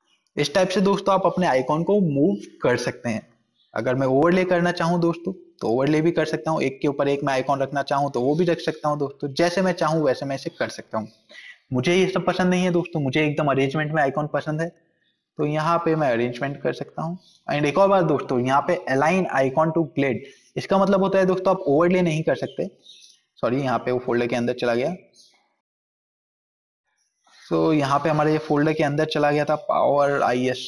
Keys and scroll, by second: 23.7 ctrl+z, 25.8 ctrl+z, 26.1 ctrl+z.